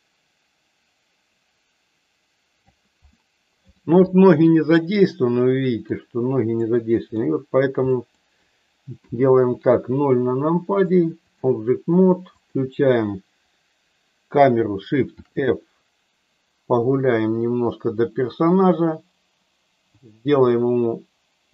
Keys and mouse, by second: 3.2 middle click, 5.1 middle click, 6.7 middle click, 7.9 middle click, 9.1 KP_0, 10.8 click, 12.3 click, 15.2 shift+f, 16.8-21.5 Up.